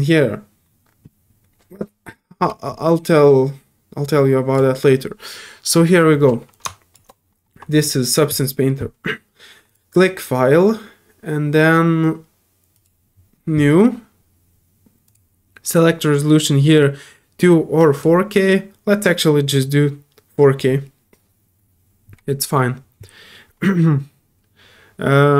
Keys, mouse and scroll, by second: 4.5 click, 6.5 click, 9.7 shift+click, 12.7 click, 15.1 click, 17.9 click.